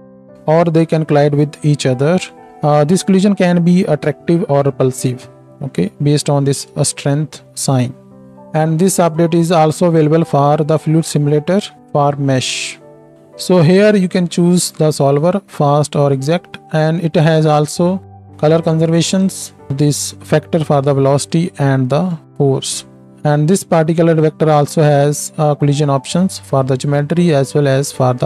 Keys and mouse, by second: 8.1 space.